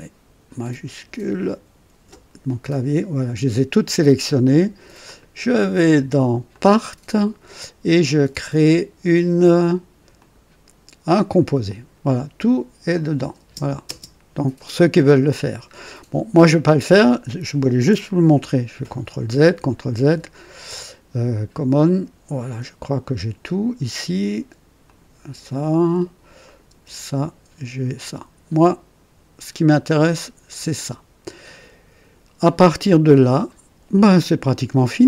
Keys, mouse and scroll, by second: 2.6 shift+click, 5.0 click, 6.4 click, 10.1 click, 11.3 click, 12.9 click, 13.3-13.8 typing, 15.6-16.1 scroll down 2, 16.7 scroll up 2, 16.9 typing, 18.8 ctrl+z, 18.8 ctrl+z, 19.4 ctrl+z, 19.9 ctrl+z, 24.8 click, 26.4 click, 26.7 space, 27.9 click, 28.6-35.0 drag.